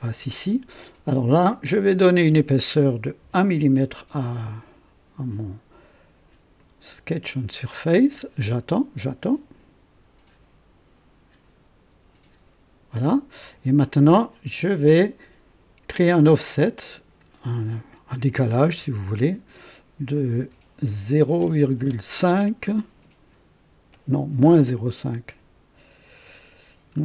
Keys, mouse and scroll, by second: 1.4 click, 3.2 KP_1, 6.5 click, 16.2 click, 18.7 KP_Subtract, 20.4 BackSpace, 21.4 KP_0, 21.8 KP_5.